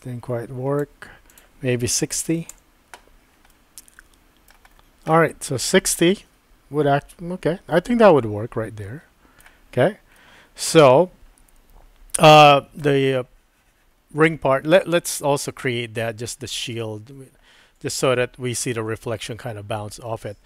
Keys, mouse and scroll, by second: 1.4-3.0 drag, 3.5-4.5 middle drag, 5.1-9.4 middle drag, 10.2-12.8 middle drag.